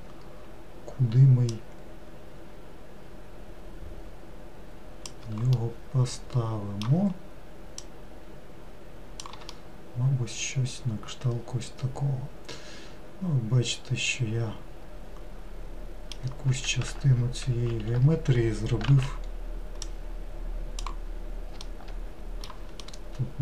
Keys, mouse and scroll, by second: 1.4 scroll up 1, 1.6 click, 5.6-7.9 middle drag, 7.9 click, 9.6-12.6 middle drag, 16.5 1, 17.8 alt+x, 19.9 click, 21.7 alt+middle click, 22.9-23.4 middle drag.